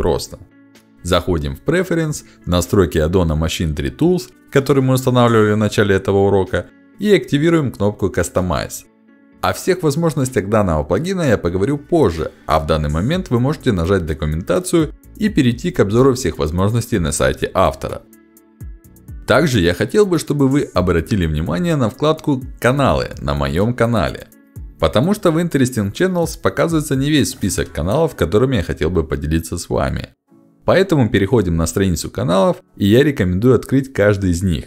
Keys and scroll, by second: 1.6 e, 2.7 BackSpace, 14.3 ctrl+alt+d, 19.4 ctrl+alt+d.